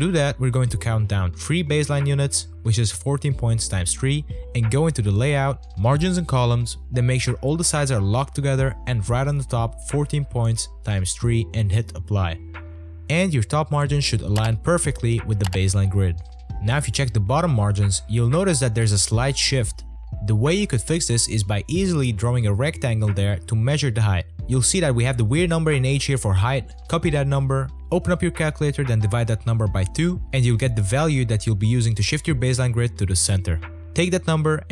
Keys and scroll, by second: 7.9-10.3 typing, 29.1 Return, 31.0 v, 34.1 c.